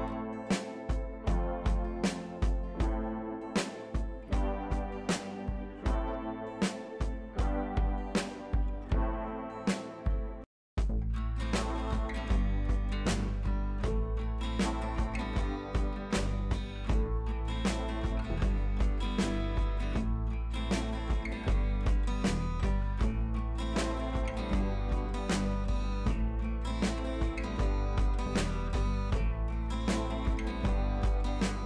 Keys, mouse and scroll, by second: 0.5 scroll up 1, 0.9-1.3 click, 3.1 ctrl+z, 3.5-4.3 click, 6.3 Up, 6.9 click, 9.5 right click, 9.5 right click, 9.9 click, 11.5-18.9 drag, 12.5 drag, 19.1-19.7 scroll up 1, 19.7-20.3 click, 22.4 click, 23.0 ctrl+t, 23.6-24.1 alt+drag, 26.9 Up, 27.2-27.8 scroll down 2, 27.4 Down, 28.1 click, 29.0 ctrl+t, 29.5-29.9 alt+drag.